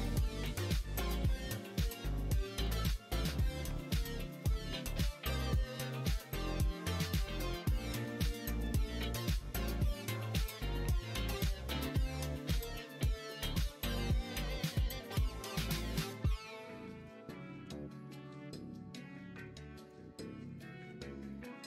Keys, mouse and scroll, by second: 0.0 shift+click, 1.0 x, 3.6 2, 4.3 alt+click, 5.7 click, 6.1 middle click, 6.6 middle click, 7.3 middle click, 8.1 shift+click, 8.4 middle click, 10.2 ctrl+e, 11.2 click, 11.6 middle click, 12.7 middle click, 13.0 middle click, 15.5 2, 16.1 click, 16.9 click, 17.6 f, 17.9 middle click, 19.4 click, 20.5 shift+click, 20.8 f, 21.3 middle click.